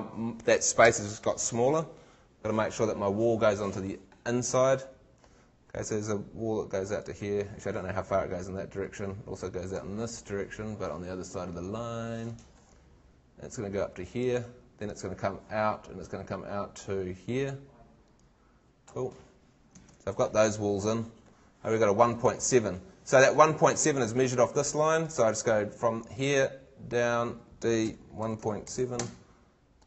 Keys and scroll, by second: 19.8 super+Tab, 22.3 super+Tab, 27.8 d.